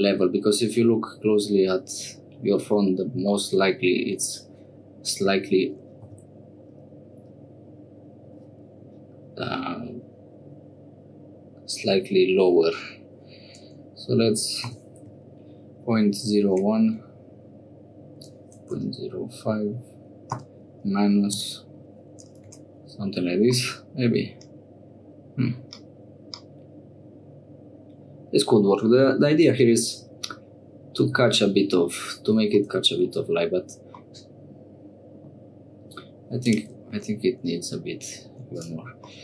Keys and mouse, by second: 2.8 click, 4.2 Tab, 6.2 e, 22.5 Tab, 23.6-29.2 middle drag, 32.6 middle click, 34.1-36.0 middle drag, 36.4 click, 37.0 Tab, 38.2 3, 38.5 click, 39.1 middle click.